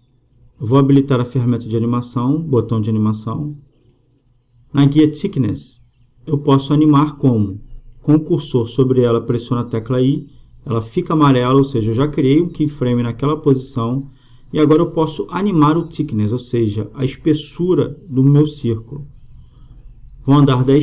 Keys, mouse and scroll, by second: 2.3-4.5 drag, 5.0-8.1 drag, 10.9 i, 20.1-20.8 drag.